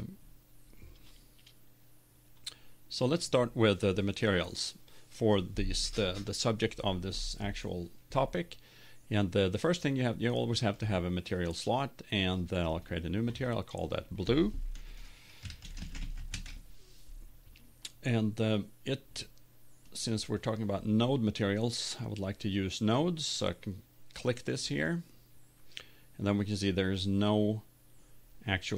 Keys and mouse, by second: 0.0-1.4 drag, 3.0-4.9 right drag, 9.5-11.4 drag, 12.7-15.7 drag, 19.9-21.8 drag, 24.7-26.6 drag.